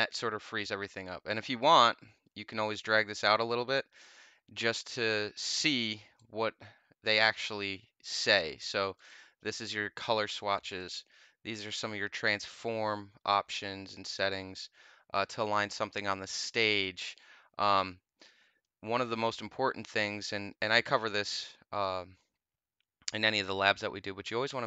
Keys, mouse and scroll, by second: 1.2-6.1 drag, 8.9 click, 10.7 click, 13.4 click, 17.6 click.